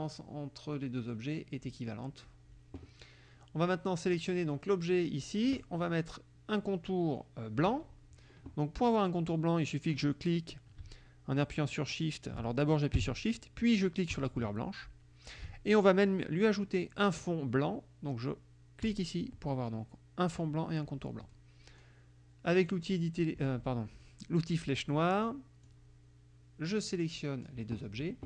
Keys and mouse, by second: 4.1 click, 14.1 shift+click, 18.8 click, 22.5 click, 25.7-27.7 drag.